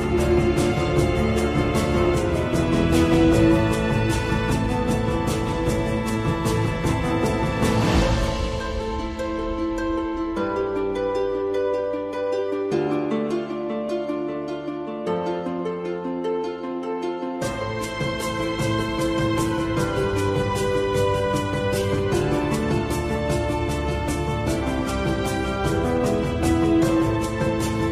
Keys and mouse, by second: 0.3 shift+click, 1.6-2.7 middle drag, 3.1 shift+click, 3.8 middle click, 5.5 shift+click, 8.4 shift+click, 9.5 shift+click, 10.9 shift+q, 11.5 middle click, 12.6 middle click, 14.6 shift+q, 15.3-17.1 middle drag, 18.0 ctrl+z, 20.5 i.